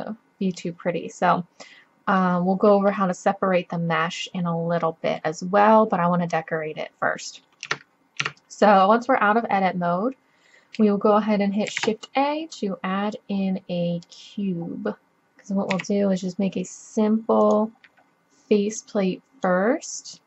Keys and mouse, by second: 0.9-2.2 middle drag, 2.5-3.3 drag, 4.6 middle drag, 6.8 middle click, 7.7 Tab, 8.3 Tab, 11.7 shift+a, 15.7 s, 16.6-17.7 drag, 18.8-20.1 drag.